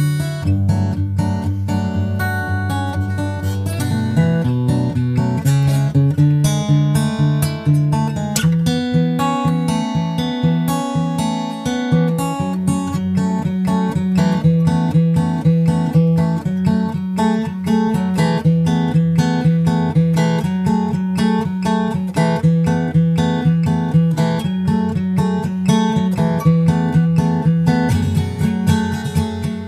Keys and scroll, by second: 1.5 super+Tab, 21.7 super+Right, 22.9 super+c, 23.7 super+v, 24.2 super+Right, 25.4 super+s.